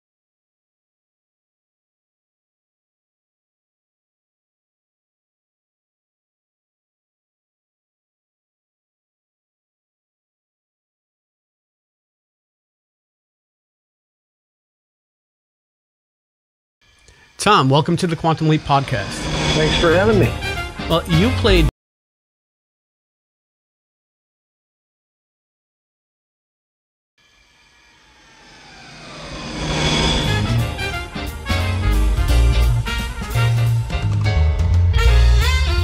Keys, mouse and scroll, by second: 0.0-0.6 typing, 2.7-3.0 scroll down 4, 5.6 click, 6.5 ctrl+click, 7.6 click, 9.3 click, 10.5-11.5 drag, 15.4 click, 16.7 space, 18.5 click, 18.7 click, 18.9 click, 19.1 click, 19.3 click, 19.5 click, 19.7 click, 19.9 click, 20.1 click, 20.3 click, 20.5 click, 20.7 click, 21.6 space, 22.1-24.9 drag, 25.7 click, 27.1 space.